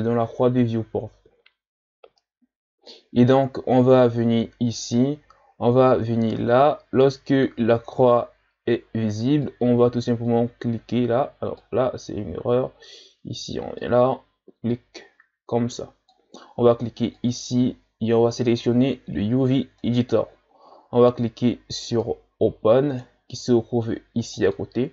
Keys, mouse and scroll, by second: 11.1-24.9 drag.